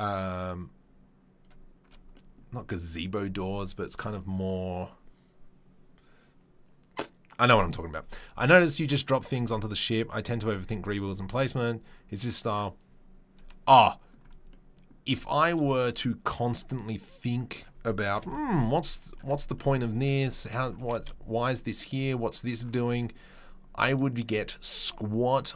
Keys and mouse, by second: 2.7-25.5 middle drag, 18.1 KP_7, 20.7 g.